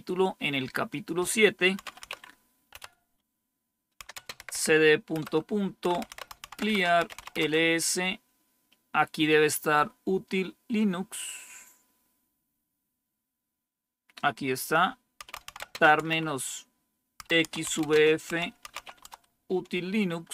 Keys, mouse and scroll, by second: 0.8 click, 1.8-2.7 typing, 4.0-7.6 typing, 14.1-15.3 drag, 14.9-19.2 typing.